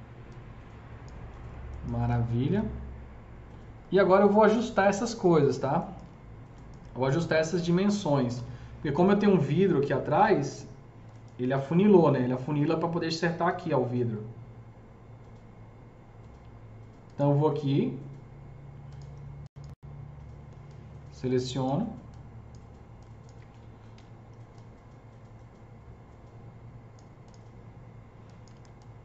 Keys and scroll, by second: 1.2 F3, 8.0-8.7 typing, 11.5 F3, 23.8 ctrl+s.